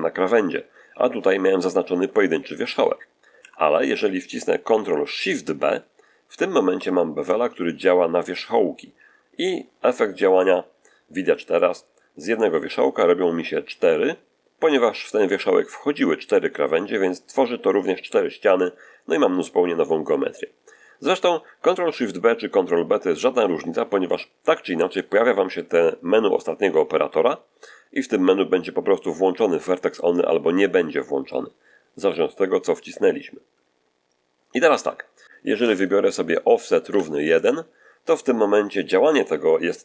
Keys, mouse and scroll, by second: 3.3 Escape, 6.6 ctrl+shift+b, 17.0 click, 36.5 click, 36.7 1, 37.3 click.